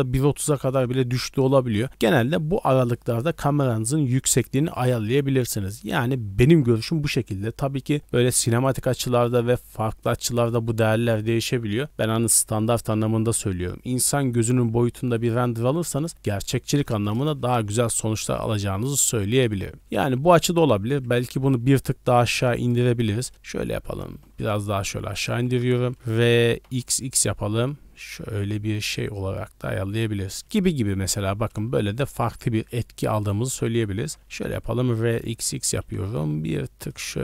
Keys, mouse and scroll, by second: 17.1 KP_0, 17.9 z, 18.8 scroll up 1, 19.5 shift+middle drag, 21.2 scroll down 1, 22.2-22.7 scroll down 1, 22.7 click, 23.2 scroll up 1, 23.5-23.9 scroll down 1, 23.9 g, 25.3 r, 30.9 scroll up 1, 31.2 scroll down 1, 33.2 ctrl+z, 33.2 scroll down 1, 34.1 r, 35.8 g.